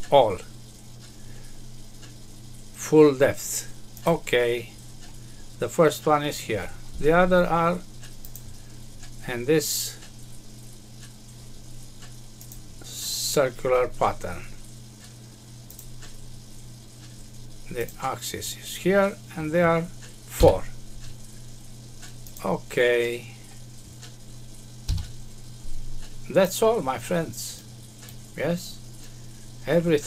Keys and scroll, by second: 24.8 F6.